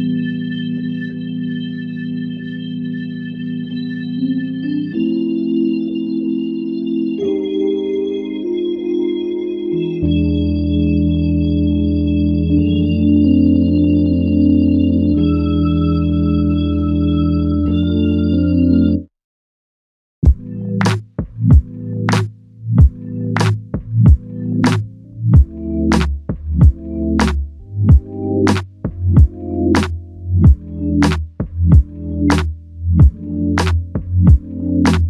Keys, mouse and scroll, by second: 6.0 ctrl+i, 7.1 alt+click, 14.0 alt+click, 24.4 alt+m, 32.4 ctrl+i, 34.6 double click.